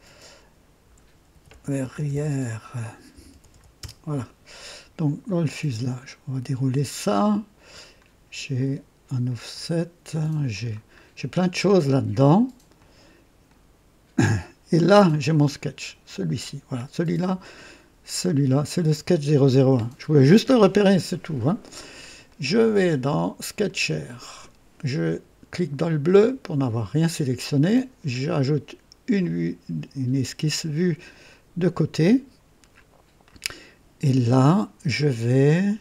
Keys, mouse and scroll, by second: 0.8 F2, 0.9 F2, 1.0-3.9 typing, 5.1 click, 7.7 click, 8.5 click, 9.2 click, 10.4 click, 10.4-11.2 typing, 10.9-11.2 scroll down 1, 12.7 click, 13.4 click, 13.4-14.2 typing, 14.1 click, 15.8 click, 22.2 click, 23.5 click, 26.0 click, 29.1 click, 31.2 click, 32.0 click, 33.2 right click.